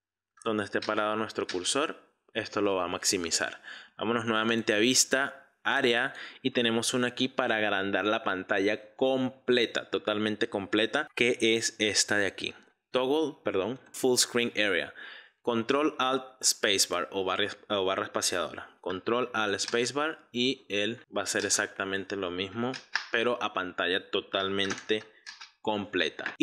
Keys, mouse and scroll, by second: 0.9 ctrl+space, 1.6 ctrl+space, 4.5-12.7 drag, 13.8-17.0 drag, 19.8 ctrl+alt+space, 21.5 ctrl+alt+space, 25.4 ctrl+alt+space, 26.3-26.4 drag.